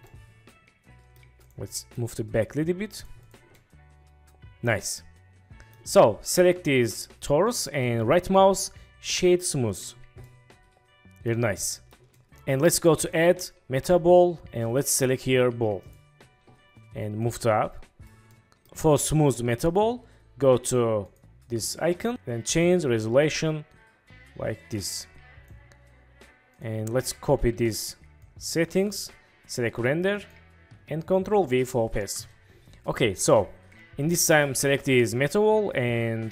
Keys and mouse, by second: 0.1-0.5 drag, 0.5-1.1 middle drag, 1.7 middle drag, 2.4 middle click, 3.5-5.7 middle drag, 10.2-11.2 middle drag, 11.6-11.9 shift+middle drag, 12.1 middle click, 13.2-16.1 drag, 17.3 drag, 18.5 click, 21.1 click, 23.2-25.6 drag, 26.7-29.8 drag, 27.7 ctrl+c, 30.3-32.3 drag, 35.1 middle click.